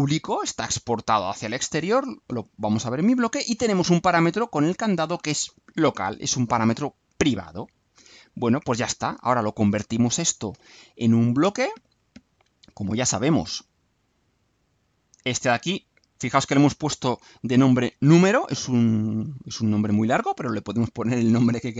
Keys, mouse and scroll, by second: 12.2 click, 13.6 click, 14.8 click.